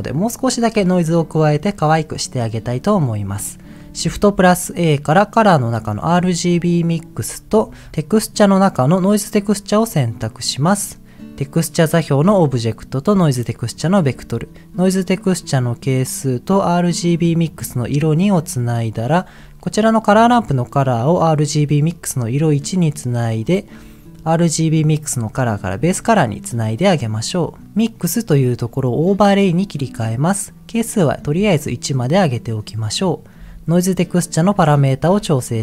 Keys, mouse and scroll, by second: 1.0-2.5 middle drag, 4.0 shift+a, 7.5 shift+a, 12.2-13.3 drag, 13.8 click, 15.7-17.4 drag, 18.4 click, 19.8-21.2 drag, 22.4 click, 24.5 click, 26.1 click, 26.8 click, 27.5 click, 27.9-29.4 drag, 30.9-31.9 drag, 34.7 middle click, 35.0 scroll up 2.